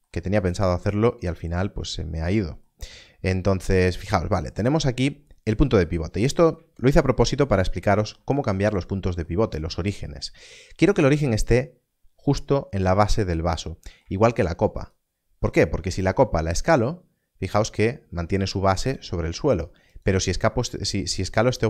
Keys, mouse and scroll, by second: 7.2-7.7 scroll up 1, 14.7 click, 18.8 s, 19.4-21.6 scroll down 1.